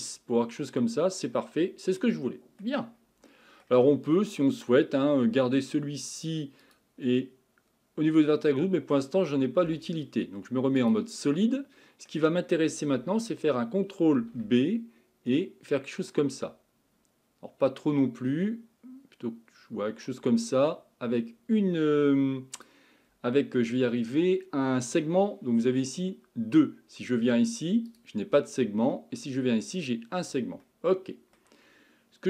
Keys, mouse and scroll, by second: 0.4-6.6 middle drag, 6.6 click, 8.5-9.6 middle drag, 9.6 z, 11.5-14.2 middle drag, 14.2 ctrl+b, 27.9-30.6 drag, 30.6-32.2 middle drag.